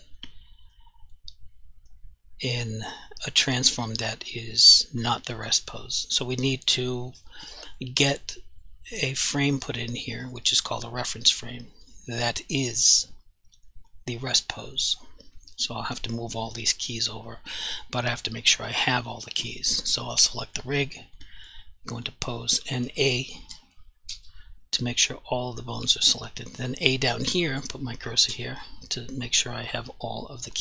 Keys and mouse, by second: 0.0 click, 1.8 click, 18.6 click, 24.1 a, 28.3 a.